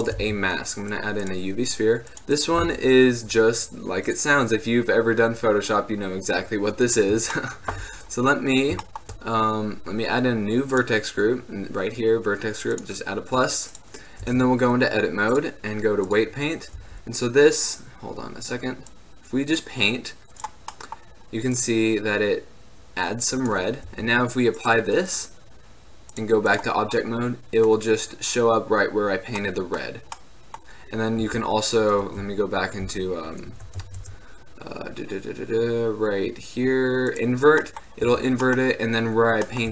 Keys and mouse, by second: 0.3 shift+a, 7.4-12.7 drag, 12.9-15.4 drag, 14.4 Tab, 16.9 t, 21.7-24.0 drag, 24.0 t, 24.7-26.6 drag, 27.0-28.0 drag, 28.0-30.3 middle drag, 31.4 t, 32.2 Tab, 33.0 Tab, 33.9 ctrl+Tab, 37.9 click, 38.2 t, 38.7-39.7 drag.